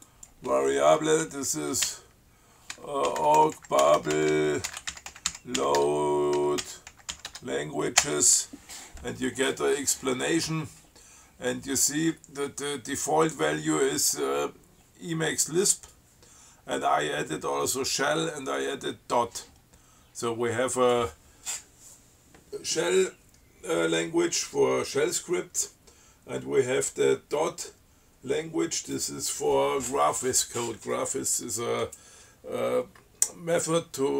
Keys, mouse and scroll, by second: 0.3 click, 2.1-7.9 typing, 8.2 Return.